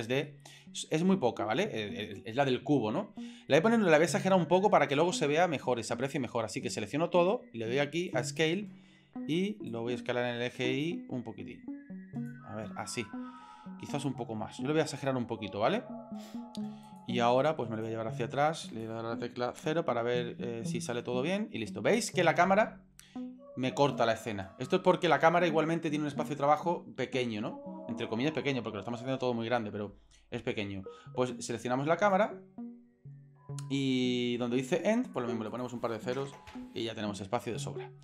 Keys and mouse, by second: 0.2-2.1 middle drag, 3.5-4.6 middle drag, 4.9-6.1 drag, 8.1 click, 9.7-12.3 drag, 13.0 middle click, 14.0 click, 17.0 click, 17.9 click, 19.6 KP_0, 32.1 click, 35.1-36.5 drag, 36.3 KP_0, 37.5 shift+middle click.